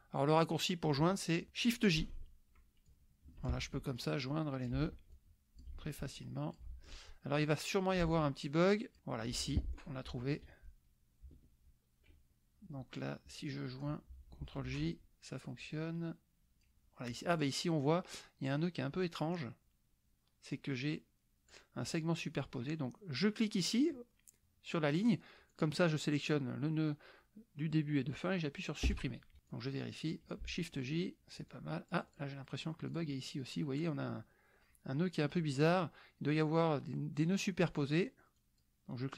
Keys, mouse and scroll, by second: 0.0 middle click, 0.5 click, 2.2 shift+j, 2.9 shift+click, 3.5 shift+j, 4.0 shift+click, 4.8 shift+j, 5.1 shift+click, 5.8 shift+j, 6.1 shift+click, 6.7 shift+j, 7.3 shift+click, 8.1 shift+j, 8.4-9.4 shift+drag, 9.5 click, 11.4 ctrl+z, 13.0-14.0 drag, 14.9 shift+j, 15.6-16.8 drag, 17.3 click, 19.3-21.7 drag, 25.5 click, 28.8 Delete, 29.5 click, 30.5 shift+j, 31.5 click, 32.9 click, 38.4 click.